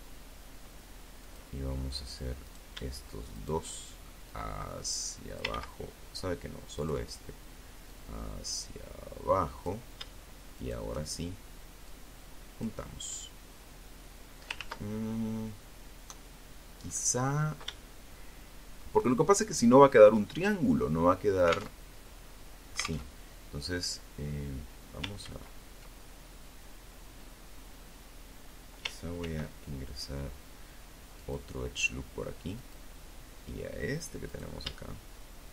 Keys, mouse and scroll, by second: 0.6 right click, 1.5 shift+right click, 2.4-3.8 drag, 3.7 ctrl+z, 4.9 right click, 6.0-8.0 drag, 8.7 shift+right click, 10.0 click, 12.7 ctrl+z, 15.0-15.6 scroll up 2, 15.9-17.1 shift+drag, 18.3-20.0 drag, 20.0 alt+Tab, 21.2 alt+Tab, 23.4 ctrl+z, 27.4 ctrl+r, 29.4 click, 30.8 click, 32.4 right click, 33.8 shift+right click.